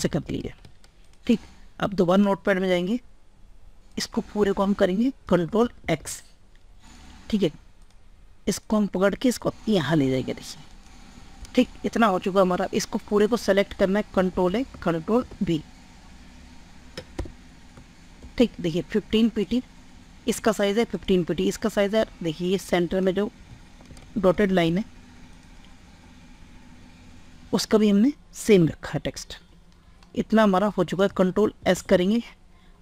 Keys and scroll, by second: 5.5 ctrl+x, 13.7 ctrl+a, 14.9 ctrl+v, 18.0 ctrl+space, 31.4 ctrl+s.